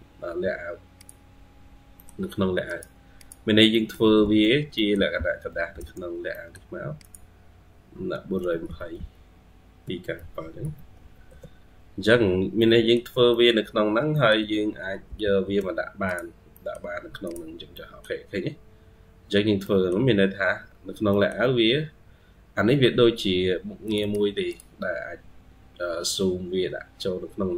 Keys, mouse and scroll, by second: 1.6 scroll down 1, 3.0 double click, 3.6 middle click, 3.9-4.8 typing, 4.6 middle click, 5.9 scroll down 1, 6.2 middle click, 8.2-8.5 typing, 9.8-11.3 typing, 12.2 scroll down 2, 12.4 middle click, 13.2 middle click, 13.6-14.0 scroll down 2, 14.0 middle click, 14.2 typing, 16.2 typing, 16.4 middle click, 17.6 middle click, 19.5 middle click, 20.6 scroll down 1, 20.8 scroll up 1, 21.0 middle click, 21.6-23.0 scroll down 3, 23.8 double click, 24.3 double click, 26.3 scroll up 1.